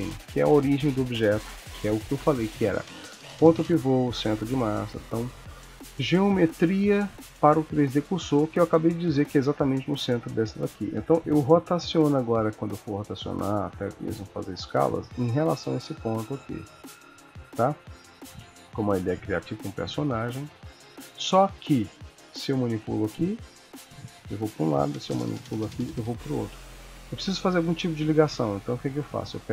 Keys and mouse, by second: 11.6 r, 13.8 s, 16.3 r, 18.4 alt+r, 19.6 ctrl+s, 21.2 click, 22.3 g, 24.7 click, 25.0 g, 29.1 click.